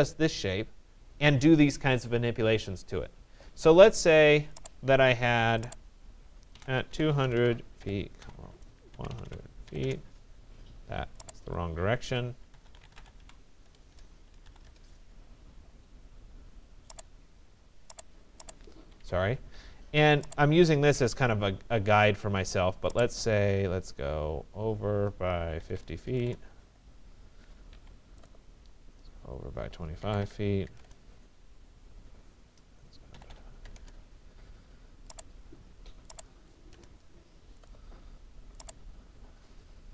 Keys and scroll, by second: 9.4 Return, 13.7 BackSpace, 14.5 e, 14.7 Return, 18.4 Escape, 25.1 5, 25.7 0, 26.2 Return, 27.7 Escape, 29.8-30.7 typing, 30.8 Return, 32.9-33.8 typing.